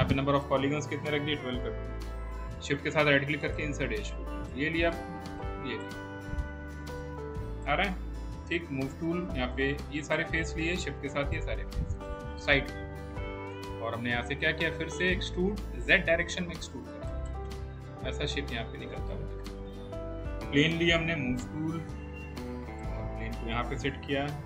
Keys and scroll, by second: 1.1 1, 1.5 2, 1.7 Return, 8.3 w, 21.1 w, 24.0 r.